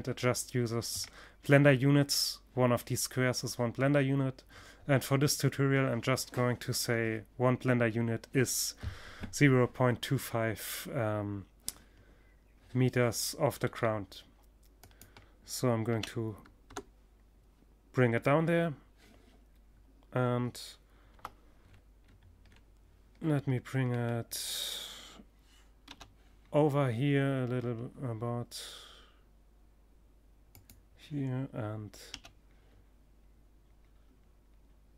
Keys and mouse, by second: 12.0-13.3 middle drag, 13.3-15.0 drag, 19.6 KP_7, 20.1-24.2 middle drag, 24.3 g, 25.0 middle click, 29.1 click, 30.6 g, 30.9 click, 31.1 middle click, 34.0-34.9 drag.